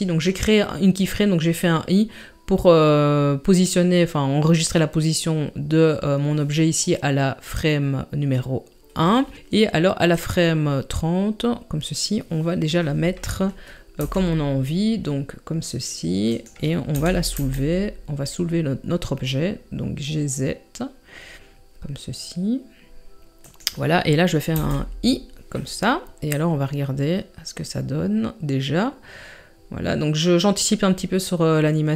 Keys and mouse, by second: 10.1-12.0 drag, 14.0 r, 17.0 g, 24.5 i, 26.3-31.9 drag.